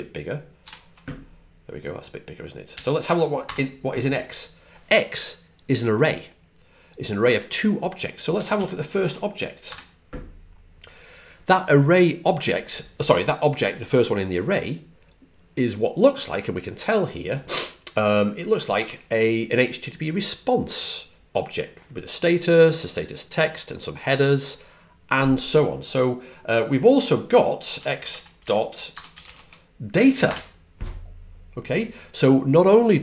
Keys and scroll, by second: 0.5 super+=, 2.6 typing, 9.4-10.1 typing, 27.3-30.2 typing.